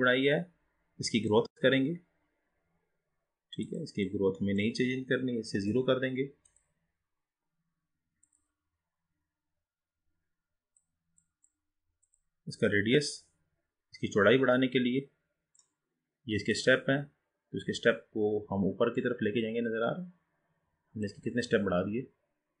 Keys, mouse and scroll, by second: 1.3-9.7 drag, 11.3-12.3 drag, 12.7-19.7 drag, 21.7-22.6 scroll down 7.